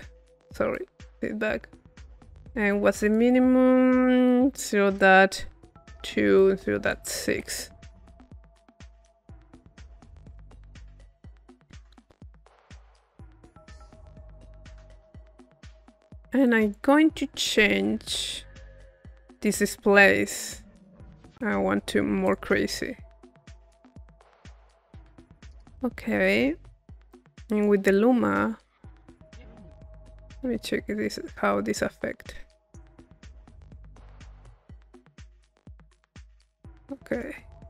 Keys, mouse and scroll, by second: 0.7-2.3 drag, 3.1 click, 4.3 click, 6.4 click, 7.5-8.8 drag, 10.3-12.2 drag, 12.2 middle click, 15.1 click, 15.9 middle click, 16.5-18.0 drag, 19.6-21.7 drag, 24.8-26.0 drag, 26.1 middle click, 27.0-28.3 drag, 28.4-37.6 drag.